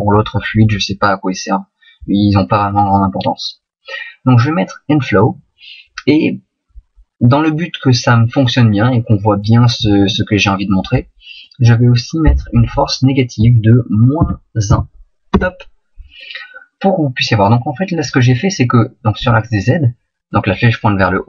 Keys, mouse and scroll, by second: 19.1 middle click.